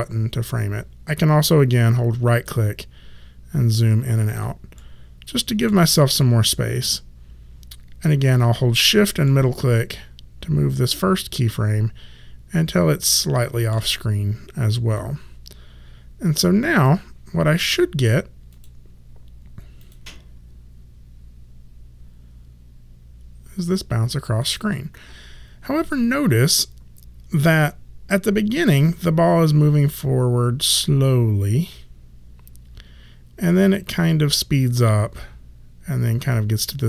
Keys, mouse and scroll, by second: 2.4 alt+right click, 4.7 alt+middle click, 9.2 shift+middle click, 14.9 click, 18.5 click, 24.2 click.